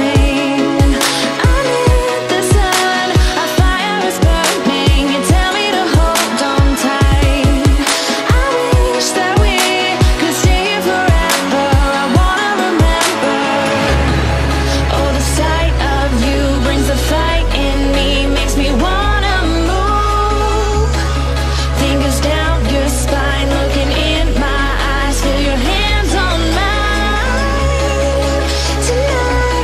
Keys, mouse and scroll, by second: 0.5 click, 1.3 Up, 2.3 Right, 3.4 Up, 3.8 Right, 5.2 click, 5.9 shift+Down, 8.6 click, 9.2 space, 9.4-9.7 click, 9.5 space, 9.9 click, 17.8 space, 17.9 click, 18.2 space, 18.5 click, 18.6 space, 19.3 click, 21.2 click, 23.6 click.